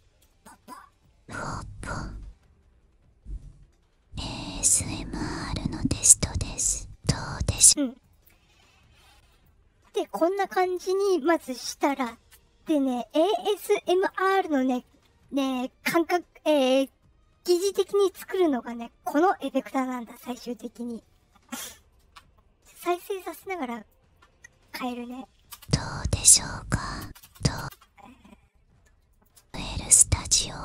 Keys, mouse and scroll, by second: 0.7 space, 7.5 space, 8.0 click, 9.2 click, 11.1-11.7 drag, 12.9-14.0 drag, 19.4-20.5 drag, 23.1 click, 24.6 click, 25.4 space, 27.0 space, 27.2 space, 27.5 space, 29.0 click, 29.3 space.